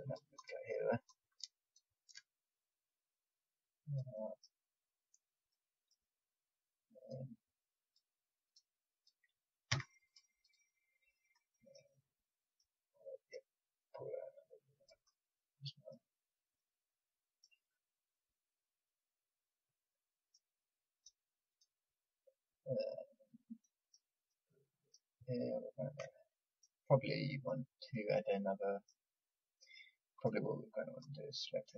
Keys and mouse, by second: 4.2 click, 5.4 click, 6.4-11.4 drag, 9.7 a, 11.4-12.5 middle drag, 12.5 click, 13.8-15.8 drag, 16.3 click, 20.2-23.6 middle drag, 30.1-31.7 drag.